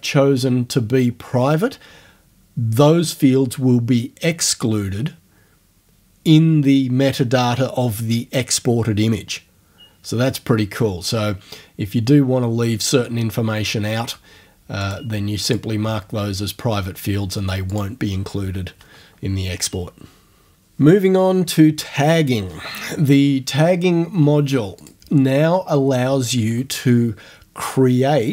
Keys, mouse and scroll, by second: 14.8 click, 15.5 click, 17.7 click, 24.8 click.